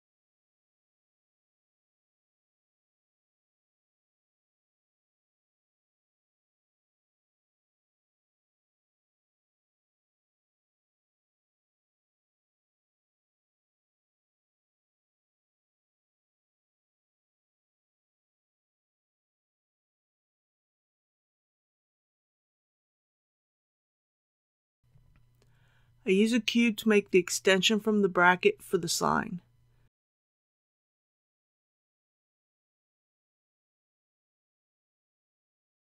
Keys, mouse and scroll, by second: 0.8 c, 1.9-5.1 drag, 5.1 right click, 6.1 shift+middle click, 6.3-6.8 scroll up 1, 6.9 shift+middle click, 7.1 shift+middle click, 7.4 shift+scroll up 1, 7.7 shift+scroll down 1, 8.1 shift+click.